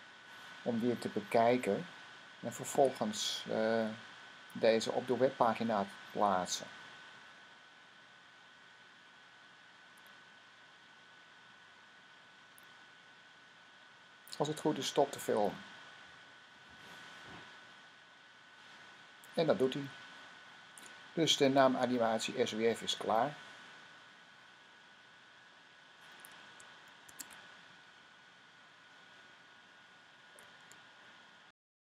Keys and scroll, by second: 26.9 shift+2.